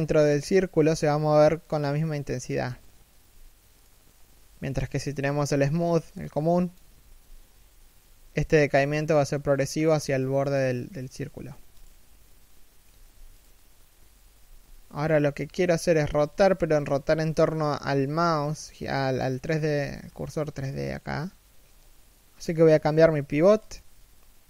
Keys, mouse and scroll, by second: 6.5 g, 12.5 g, 14.0 r, 18.5 middle click, 19.1 KP_1, 19.3-19.6 scroll up 1, 21.2-22.0 scroll down 1.